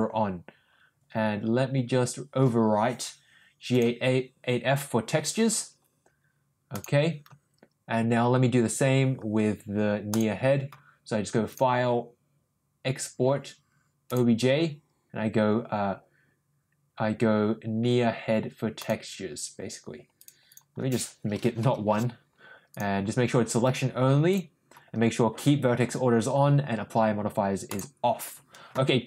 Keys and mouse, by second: 10.0 click, 11.6-14.2 drag.